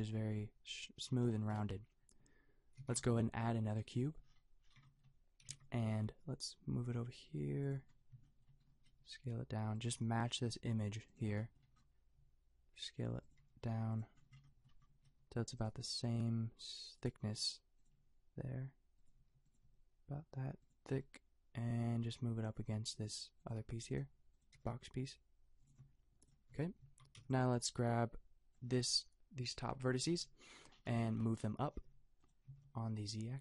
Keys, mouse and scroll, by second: 1.6 a, 2.8 shift+a, 5.4 g, 8.8 s, 9.9 click, 9.9 g, 12.1 s, 13.4 g, 15.1 s, 15.7 g, 17.2 s, 17.9 g, 19.1 s, 19.6 g, 20.9 g, 23.4-27.7 drag, 23.6 g, 24.5 g, 26.5 Tab, 26.8 a, 27.2 b, 31.6 g, 32.4 g.